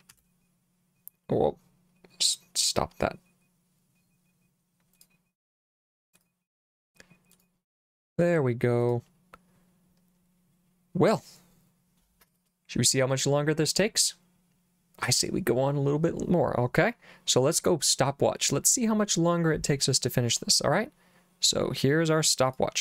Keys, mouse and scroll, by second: 0.1 s, 2.6 click, 5.0 click, 6.2 click, 7.4 click, 8.9 click, 20.3 click, 22.5 click.